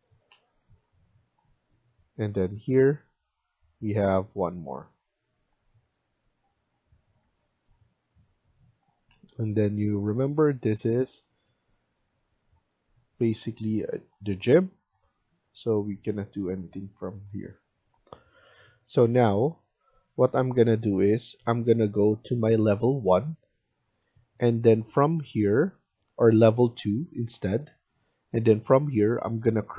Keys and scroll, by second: 7.2 Escape, 17.8 F1.